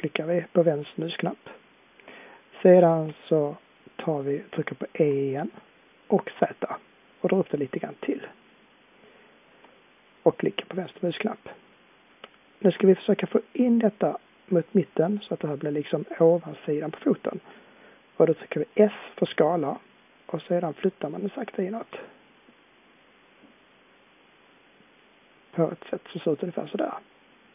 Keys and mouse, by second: 4.9 e, 18.8 s.